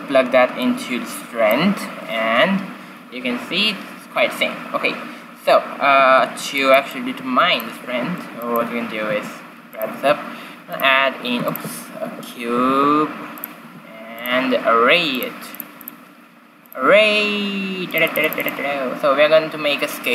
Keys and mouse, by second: 6.2 shift+z, 7.9 q, 8.9 g, 9.8 shift+a, 11.3 x, 11.8 shift+s, 12.6 shift+a, 13.6 s, 17.8-20.1 drag.